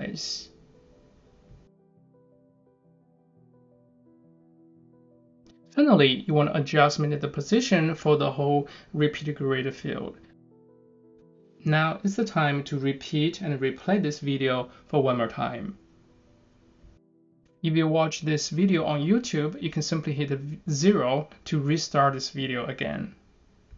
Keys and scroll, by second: 1.0 super+s.